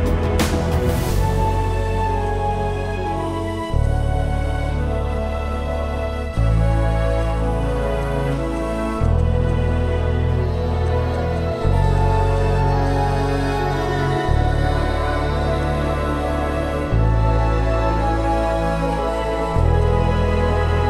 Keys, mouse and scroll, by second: 0.6 right click, 9.1 double click, 14.4 scroll down 1, 14.6 alt+scroll up 1, 15.2 alt+scroll up 1, 18.8-20.2 alt+scroll down 1, 20.3-20.8 alt+scroll down 3.